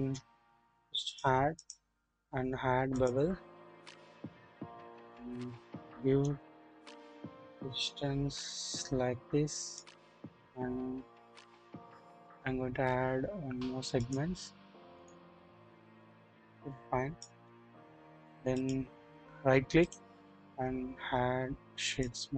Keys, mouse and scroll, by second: 4.1 scroll up 1, 6.2-9.9 drag, 14.1 click, 14.9 click, 15.4-16.0 scroll down 1, 16.0-17.3 drag, 17.4-18.1 scroll up 1, 18.1-18.8 scroll down 1, 19.8 right click, 19.9-22.0 drag.